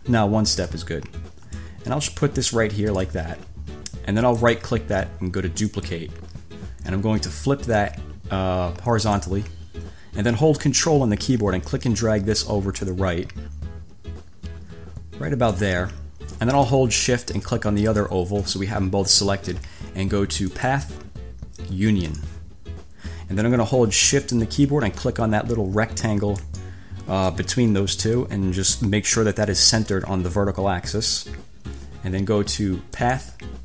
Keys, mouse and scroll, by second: 1.8 ctrl+click, 4.5 click, 5.9 click, 9.3 click, 11.5-15.9 ctrl+drag, 17.9 shift+click, 20.7 click, 22.2 click, 26.6 shift+click, 31.1 click, 33.3 click.